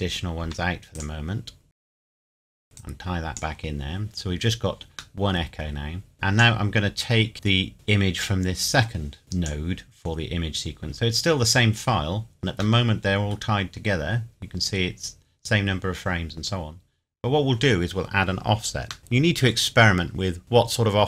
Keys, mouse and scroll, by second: 0.4 Delete, 1.0 click, 1.7 Delete, 1.9 click, 2.3 scroll down 1, 2.4 click, 2.5 scroll up 1, 2.6 middle click, 2.6 scroll down 1, 2.8 click, 5.2 middle click, 6.1 click, 12.8 middle click, 13.6-15.0 scroll up 1, 19.0 middle click, 19.5 scroll up 1.